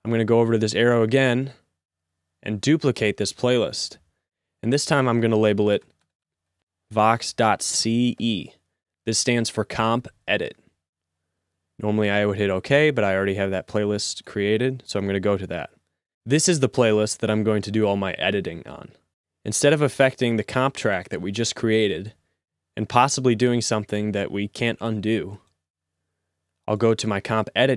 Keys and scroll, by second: 5.4 Right, 5.9 BackSpace, 6.1 BackSpace, 6.5 BackSpace, 7.8 c, 8.2 e.